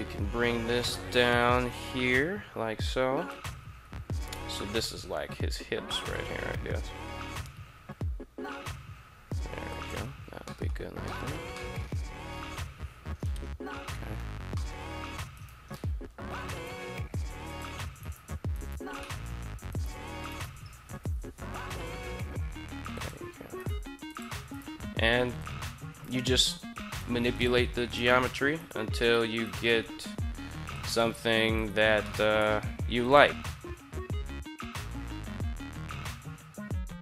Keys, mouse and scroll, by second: 2.9 click, 3.9 alt+right click, 6.8 g, 9.5 click, 10.3 shift+middle drag, 10.8 middle drag, 11.3 middle click, 11.9 KP_3, 14.3 shift+middle drag, 15.1 right click, 16.4 g, 17.3 click, 17.7 right click, 18.1 g, 18.3 right click, 18.7-19.1 middle drag, 19.4 right click, 20.2 shift+right click, 20.7 KP_3, 21.8 g, 22.8 click, 23.3 right click, 23.5 g, 23.9 click, 24.2 right click, 24.5 g, 25.2 click, 25.6 right click, 26.2 click, 26.2-29.5 typing, 26.7 right click, 27.2 click, 27.9 right click, 28.3 right click, 28.8 right click, 29.2 right click, 30.5 click, 31.4 right click, 31.9 shift+middle click, 32.2 g, 32.8 click, 33.4 right click, 33.8 click, 33.8 g, 33.9 shift+middle click, 34.2 right drag, 34.4 g, 34.7 drag, 35.0 right click, 35.2 drag, 35.2 g, 35.4 right click, 35.6 drag, 35.6 g, 36.0 middle click, 36.2 middle click, 36.3 middle click, 36.6 right click, 36.9 click, 36.9-37.0 typing.